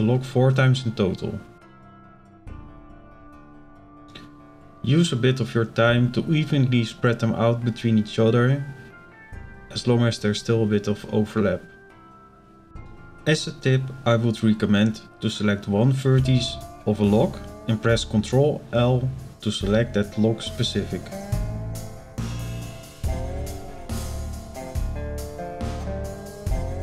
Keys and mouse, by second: 2.1 shift+d, 3.1-4.3 drag, 5.2 shift+d, 6.1-7.4 drag, 7.8 shift+d, 8.7-10.9 drag, 11.8 shift+middle click, 14.0-15.9 drag, 16.4 click, 17.4 ctrl+l, 19.4-21.7 drag, 23.7 ctrl+l, 25.7 click.